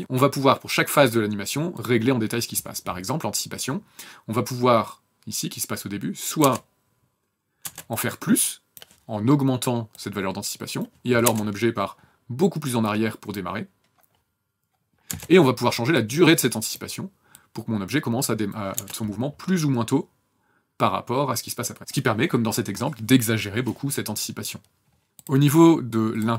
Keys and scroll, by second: 0.0 KP_0, 6.4 KP_0, 7.6 KP_0, 11.2 KP_0, 15.1 KP_0, 18.7 KP_0, 25.0 KP_0.